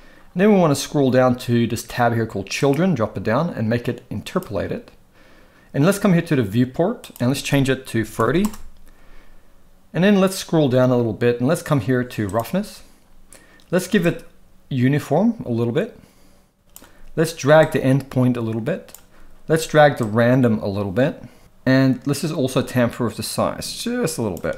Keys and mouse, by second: 2.6 click, 4.3 click, 7.0-8.5 drag, 12.3 click, 14.0-16.8 shift+drag, 17.8-19.0 shift+drag, 20.1-21.4 shift+drag, 22.8-24.4 shift+drag.